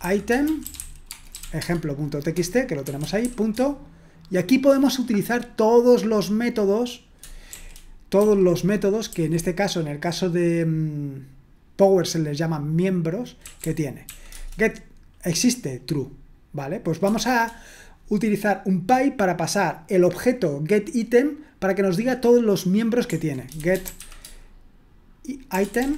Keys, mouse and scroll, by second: 0.0-3.3 typing, 8.9-9.6 typing, 13.8-14.5 typing, 23.6-25.9 typing.